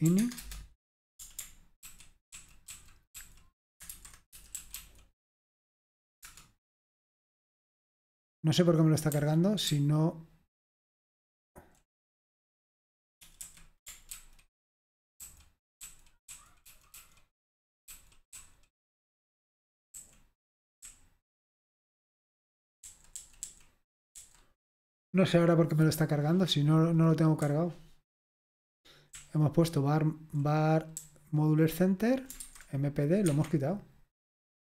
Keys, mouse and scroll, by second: 0.0-0.5 typing, 1.9 ctrl+d, 2.3 ctrl+d, 2.8 ctrl+d, 3.2 ctrl+d, 3.7-5.2 typing, 6.4 Return, 9.1 n, 10.3-10.7 typing, 12.8-13.5 typing, 14.2 ctrl+d, 15.2 ctrl+d, 15.9 ctrl+d, 16.3-18.6 ctrl+d, 19.9 ctrl+k, 20.6-21.6 typing, 22.8-24.6 typing, 27.5-32.4 typing, 33.2 Escape.